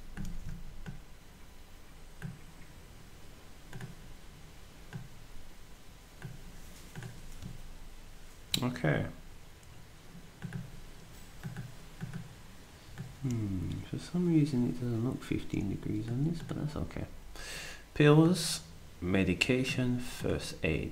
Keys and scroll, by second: 0.3 ctrl+z.